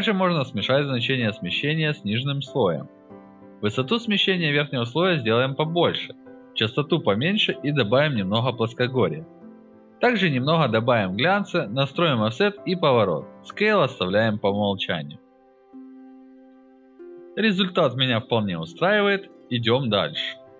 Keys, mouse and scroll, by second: 1.0-2.5 drag, 3.0-4.9 drag, 5.3 alt+middle click, 5.4 alt+click, 6.3 click, 6.8 alt+middle click, 6.9 alt+click, 7.4-8.7 drag, 8.8 alt+middle click, 8.9 alt+click, 9.1 alt+right click, 9.4-10.1 drag, 10.7 alt+click, 10.9 alt+right click, 11.4-12.5 drag, 12.7-13.2 drag, 13.3 alt+right click, 13.5 alt+click, 14.1-14.4 drag, 14.7-15.5 drag, 15.9 alt+scroll up 1, 16.0 alt+click, 17.1 alt+middle drag, 17.5 alt+drag, 17.7 alt+right drag, 18.2 alt+middle click, 18.4 alt+click, 18.7 alt+right click, 19.0 alt+click, 20.0 alt+right click, 20.3 alt+click.